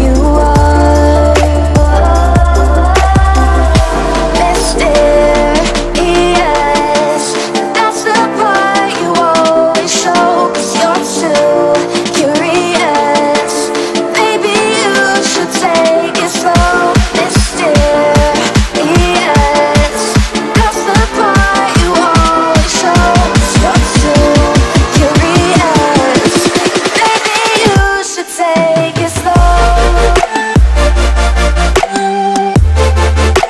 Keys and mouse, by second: 0.0 right click, 0.6 click, 3.6 space, 4.5-5.9 drag, 7.6 BackSpace, 7.8 space, 8.0 click, 8.0 space, 8.5-9.2 drag, 11.8 space, 11.9 click, 12.1 space, 12.9 click, 13.4-14.3 alt+drag, 15.4-16.3 shift+click, 16.9-18.7 drag, 19.8 space, 20.0 click, 20.0 space, 20.5 ctrl+-, 20.7-21.2 space, 22.4-22.9 click, 23.3-26.2 alt+drag, 26.8 space, 27.7-28.1 click, 28.3-32.1 alt+drag, 32.6 space, 33.3 ctrl+=.